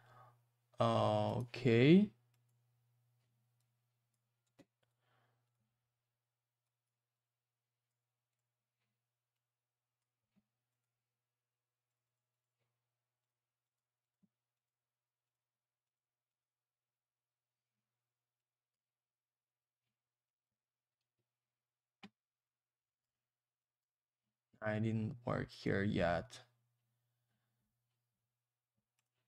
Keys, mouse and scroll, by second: 1.3 click, 1.4 click, 2.3 click, 2.4 click, 3.6 click, 4.8 right click, 4.9 right click, 5.4 click, 5.5 click, 6.6 click, 7.1 click, 8.3 click, 10.8 click, 11.9 click, 11.9 click, 12.0 click, 12.1 click, 12.3 click, 12.4 double click, 13.2 click, 13.3 click, 13.6 click, 13.8 double click, 14.0 click, 14.1 click, 14.5 click, 14.7 click, 15.2 click, 15.3 click, 15.8 click, 15.9 click, 16.3 click, 16.4 click, 18.4 click, 20.2 click, 20.4 click, 21.0 ctrl+z, 22.4 click, 23.6 click, 25.5 click, 25.6 click, 29.0 click.